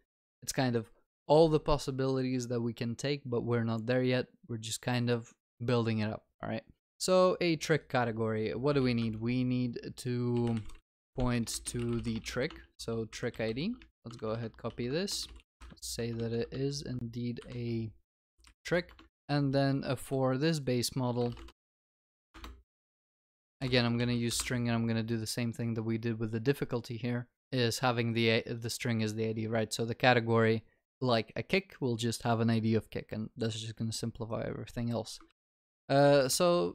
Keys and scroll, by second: 9.0 Tab, 12.7 ctrl+s, 13.1 ctrl+c, 13.3 ctrl+v, 14.7 ctrl+w, 16.6 Return, 16.6 ctrl+e, 18.2 ctrl+s, 19.2 Tab, 20.1 Escape, 22.3 Escape, 22.3 Return, 24.0 ctrl+s, 35.3 ctrl+c, 36.3 ctrl+v.